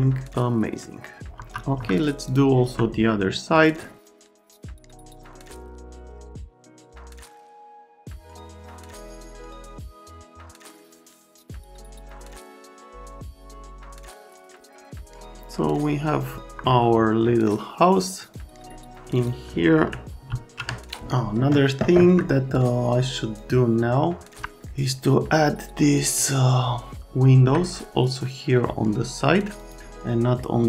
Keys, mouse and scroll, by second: 0.4 right click, 1.3 F3, 1.7 F3, 2.3 middle click, 2.6 F3, 3.5 click, 4.0 alt+middle click, 4.1 alt+1, 4.2 right click, 4.4 alt+q, 4.4 middle click, 4.5 click, 4.6 alt+middle click, 4.9 click, 5.6 alt+middle click, 6.1 click, 6.7 click, 7.0 alt+middle click, 7.1 click, 7.3 F3, 7.5 Escape, 7.7 right click, 7.8 click, 8.2 right click, 8.5 z, 8.5 right click, 8.7 z, 8.7 F3, 8.8 right click, 9.2 shift+middle click, 9.9 right click, 10.1 middle click, 10.4 alt+right click, 10.6 middle click, 10.7 right click, 11.3 ctrl+click, 11.6 F3, 11.7 click, 12.1 ctrl+click, 12.2 click, 12.4 right click, 12.5 click, 12.8 middle click, 13.2 click, 13.2 middle click, 14.1 z, 14.2 alt+middle click, 14.7 F3, 14.8 right click, 15.0 click, 16.3 F3, 18.2 click, 19.1 click, 20.3 alt+x, 21.9 F3, 23.3 click, 24.4 F3, 26.2 alt+middle click, 29.6 middle click, 30.4 right click.